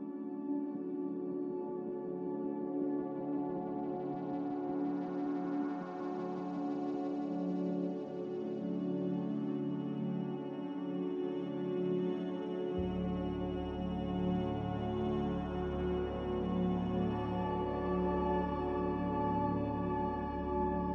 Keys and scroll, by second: 5.6 Tab, 5.6 Return, 5.6 typing, 9.8-10.7 typing, 11.6 Return, 17.8-18.2 typing, 18.8 Return.